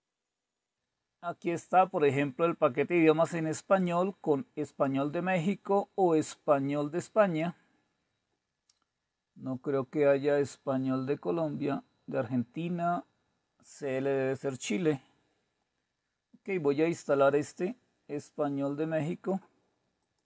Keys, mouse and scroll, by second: 3.3-10.7 drag, 11.1-11.9 scroll down 2, 11.9-12.7 scroll down 1, 14.6-16.2 scroll down 2, 16.8-20.2 drag.